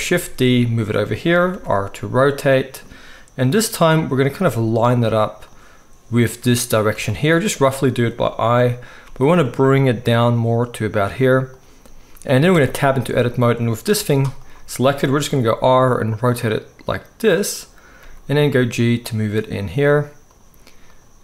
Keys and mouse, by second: 0.2 shift+d, 1.5 r, 4.4 g, 9.0 g, 12.1-14.4 right drag, 12.5 Tab, 13.9 g, 14.4-20.9 middle drag, 15.2 r, 18.0 g, 20.9 click, 21.0-21.2 middle drag.